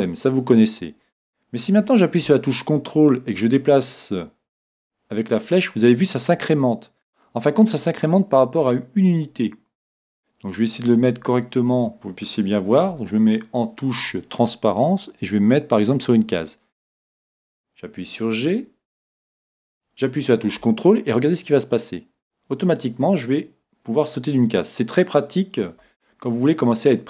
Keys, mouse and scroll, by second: 3.5-5.3 drag, 10.6-12.8 middle drag, 12.9 z, 14.3-16.1 drag, 21.3-23.1 drag, 26.1-27.0 middle drag.